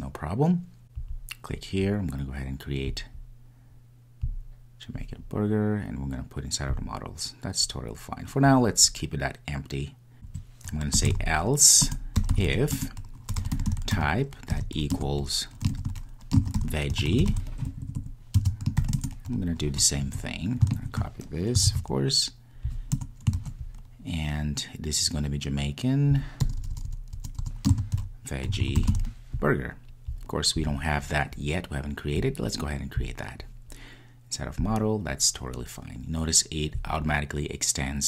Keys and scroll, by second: 11.8 Return, 11.9 Return, 13.1 Return, 21.7 super+c, 23.7 super+v.